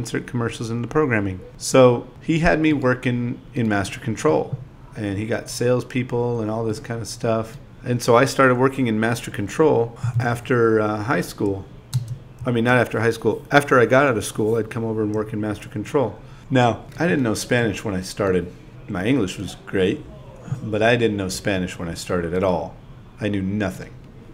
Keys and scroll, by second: 1.5 0, 2.1 4, 3.9 i, 4.2 shift+e, 6.3 super+v, 7.4 shift+p, 8.1 i, 9.7 8, 11.5 2, 13.3 shift+e, 14.2 space, 14.6 space, 15.6 space, 16.0 space, 18.6-20.4 typing, 21.7 space, 21.9 space, 23.0 super+v.